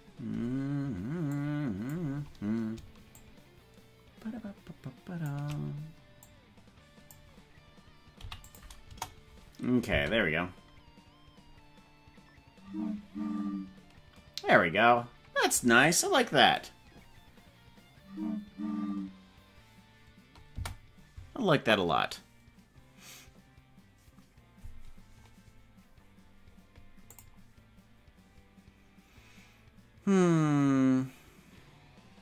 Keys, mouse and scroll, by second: 1.3 click, 3.1-5.3 shift+drag, 6.2 click, 8.2 i, 8.8 KP_0, 9.9 space, 20.5 space.